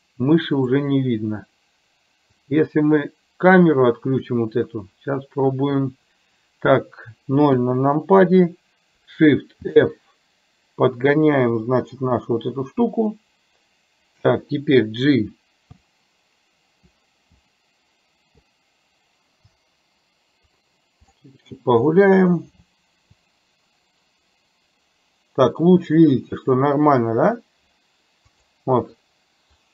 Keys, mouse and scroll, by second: 2.5 click, 7.7 KP_0, 9.7 shift+f.